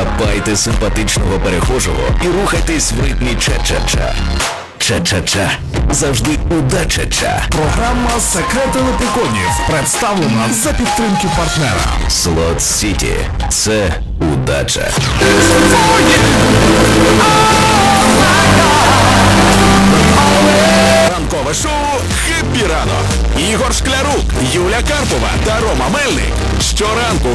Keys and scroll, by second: 21.5 Page_Down.